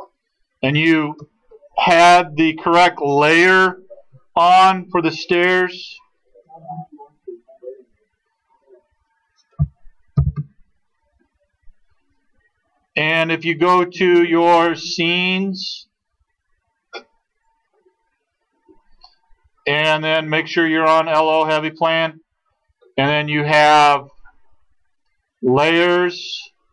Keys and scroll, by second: 10.1 alt+d.